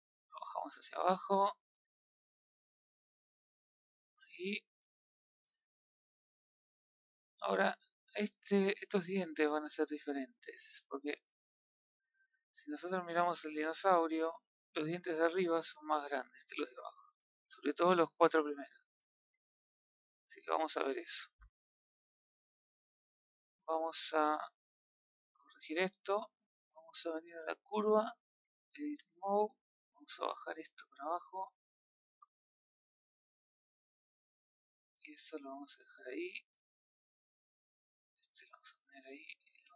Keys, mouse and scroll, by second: 0.0 click, 3.3 click, 4.9-6.4 middle drag, 6.6 scroll up 1, 7.0-7.5 middle drag, 7.7-8.3 middle drag, 9.0 click, 9.3-20.2 middle drag, 20.2 click, 20.4 scroll down 1, 20.6-25.7 middle drag, 25.9 middle drag, 26.3-26.6 scroll up 3, 27.2 click, 27.9-28.4 middle drag, 28.4 Tab, 29.2-30.2 middle drag, 30.2 click, 30.3 middle click, 31.1 click, 32.9 middle click, 33.7 scroll up 1, 33.8 middle click, 34.5-34.9 scroll down 1, 34.9-36.7 middle drag, 36.7 click, 38.6 middle click, 39.4 r.